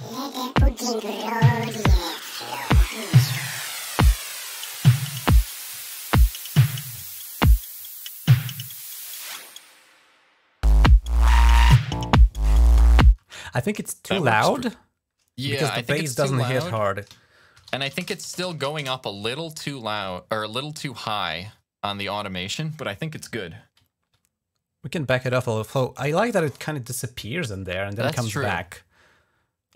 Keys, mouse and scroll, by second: 0.7 click, 1.3-1.7 scroll up 2, 1.9 click, 2.2 ctrl+click, 2.4 ctrl+s, 3.5 click, 4.0-4.5 scroll up 1, 4.6-5.2 scroll down 2, 5.5 g, 5.8-6.3 scroll up 1, 12.0 scroll down 1, 13.0 space, 13.9 click, 14.2 click, 17.1-19.1 typing, 20.2-21.8 drag, 20.5 typing, 23.7 ctrl+scroll up 1.